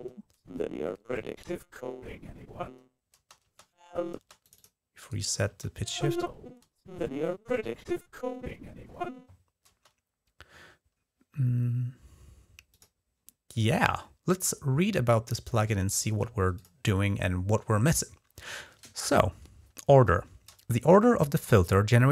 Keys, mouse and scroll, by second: 2.9-3.9 typing, 4.2 click, 4.8 right click, 5.3 typing, 9.5 space, 12.5 click, 15.5 middle click, 16.3 click.